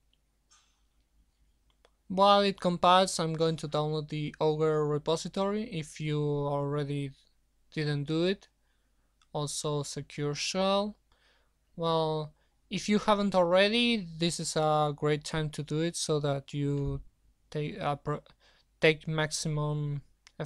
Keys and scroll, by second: 9.3 super+1, 16.2 ctrl+v, 18.9 shift+o.